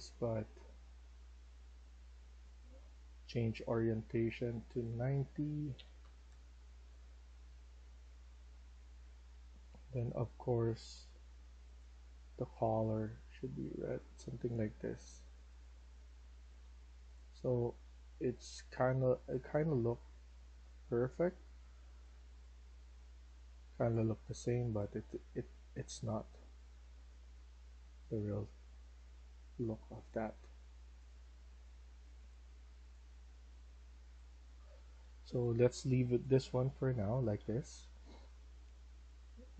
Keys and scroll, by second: 5.6-6.0 typing, 6.2 Return, 16.2 a, 16.6 w, 22.1 s, 22.4 a, 23.0 w, 23.8 d, 25.8-29.3 typing, 33.9-37.3 typing.